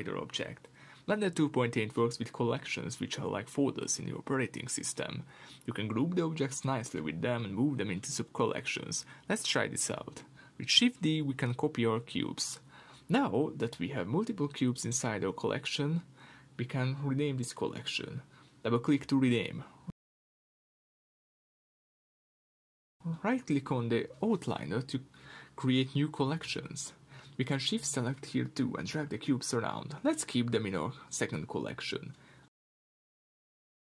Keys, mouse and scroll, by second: 13.0 shift+d, 14.5 click, 17.3 shift+d, 18.2 click, 19.4-23.4 drag, 21.2 Return, 23.4-25.2 right drag, 25.3-27.9 drag, 26.6 l, 29.9 click.